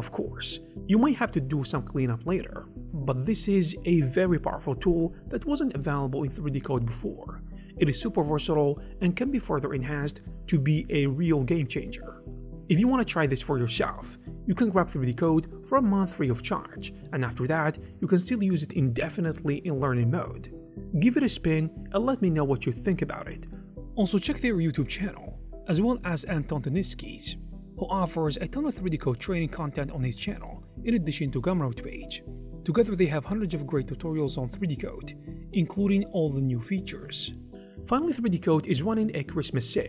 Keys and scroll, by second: 32.7 [, 35.1 ], 36.0 ], 36.7 ].